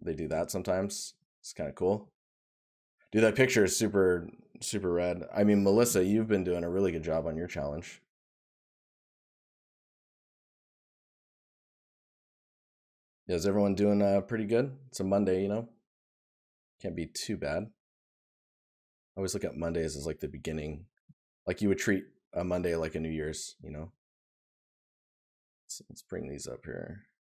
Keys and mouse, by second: 12.3 right click, 13.5 right click, 20.8 right click.